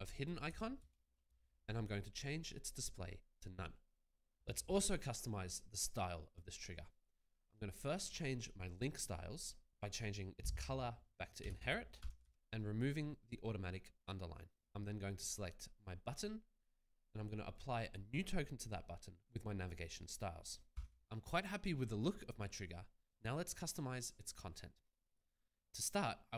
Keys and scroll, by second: 0.0-1.2 typing, 1.3 Return, 11.5-12.9 typing, 20.8 a.